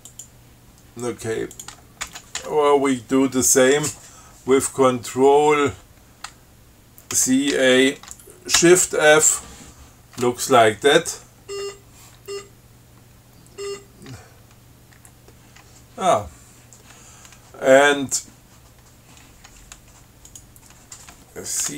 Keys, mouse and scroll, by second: 0.4 click, 1.8 ctrl+click, 2.3 ctrl+x, 2.6 ctrl+1, 7.4 ctrl+c, 7.8 ctrl+a, 8.4 ctrl+shift+a, 8.9 shift+f, 11.7-12.1 scroll up 2, 12.5 scroll down 2, 13.9 scroll up 2, 15.2 q, 20.5 click.